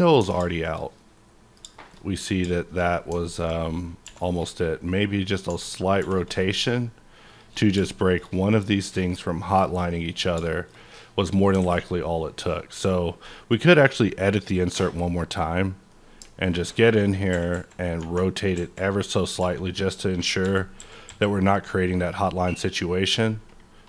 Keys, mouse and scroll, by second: 0.2 Tab, 0.5 shift+middle click, 1.9 shift+scroll down 1, 2.0-2.5 scroll up 2, 2.5 middle click, 3.2-3.5 alt+middle drag, 3.5-4.0 scroll down 1, 4.0 r, 6.0 r, 7.3 shift+click, 7.9 shift+middle click, 10.4 shift+middle click, 10.9-13.6 middle drag, 11.6 alt+a, 13.6 click, 14.3 click, 15.3 click, 15.8-17.3 middle drag, 17.3 KP_8, 17.3 KP_5, 17.5 KP_8, 18.0 Num_Lock.